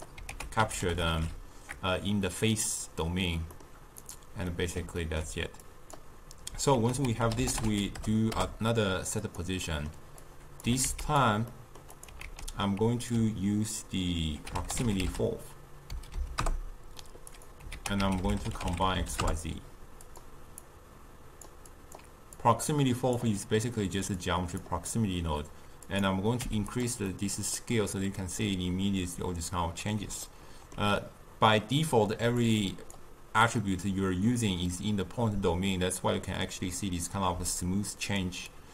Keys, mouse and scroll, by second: 9.2 ctrl+a, 21.4 click, 23.1-28.1 drag, 28.1-37.5 middle drag, 37.5 click, 38.1 d, 38.4-38.7 drag.